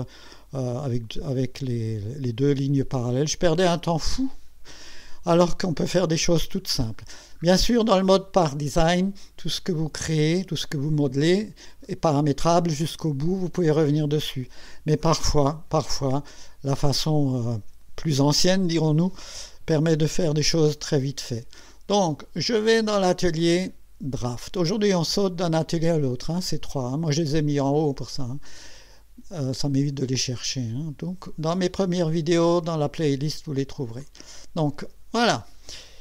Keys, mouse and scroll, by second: 5.3-6.3 drag, 6.7 scroll up 1, 7.1 scroll down 1, 23.1 click, 34.0 click.